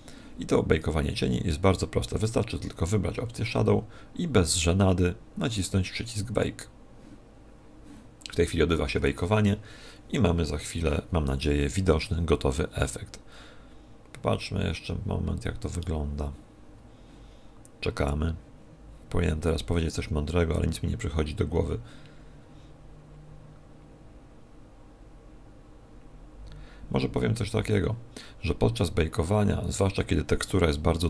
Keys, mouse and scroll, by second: 1.3 middle click, 6.3 click.